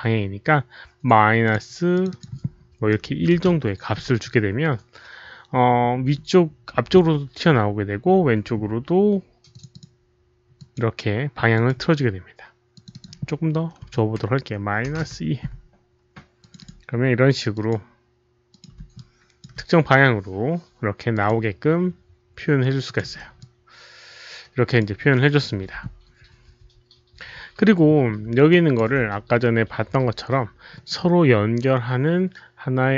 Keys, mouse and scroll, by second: 0.2 alt+click, 0.2 alt+middle click, 1.4 alt+click, 1.4 alt+middle click, 1.9 click, 2.0 click, 3.0 KP_Subtract, 3.1-4.0 typing, 3.5 click, 5.6 Return, 5.6 KP_Subtract, 5.6 click, 5.6 1, 8.1 Return, 9.4 KP_Subtract, 9.4 click, 9.4 1, 9.6 click, 10.5 Return, 10.5 KP_Subtract, 10.5 click, 10.5 1, 11.5 click, 12.7 click, 13.8 KP_Subtract, 15.0 Return, 15.0 KP_Subtract, 15.0 click, 15.0 KP_2, 15.4 Return, 15.4 KP_Subtract, 15.4 click, 15.4 KP_2, 16.3 click, 16.4 Return, 16.4 KP_Subtract, 16.4 KP_2, 16.5 click, 17.5 click, 18.4 click, 18.9 alt+click, 21.1 Return, 21.1 KP_Subtract, 21.1 alt+click, 21.1 KP_2, 22.8 Return, 22.8 KP_Subtract, 22.8 alt+click, 22.8 KP_2, 23.3 Return, 23.3 KP_Subtract, 23.3-24.7 alt+drag, 23.3 KP_2, 23.5 Return, 23.5 KP_2, 24.7 Return, 24.7 KP_2, 25.1 alt+right click, 27.4 alt+right click, 28.4 alt+drag, 28.4 alt+right click, 28.9 alt+right click, 31.9 alt+click, 31.9 alt+right click.